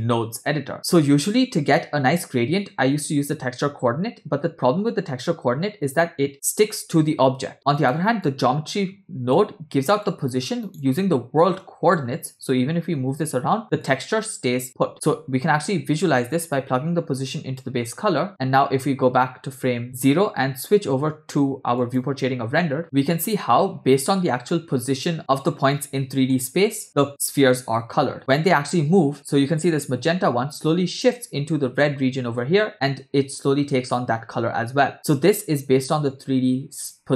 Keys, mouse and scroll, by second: 0.7-1.9 scroll up 2, 7.8 click, 8.3-9.4 drag, 10.0-10.7 drag, 13.9-14.9 drag, 16.5-17.7 drag, 18.7-20.1 drag, 22.1 click, 23.2-24.5 middle drag, 26.4-27.6 middle drag, 30.2 space.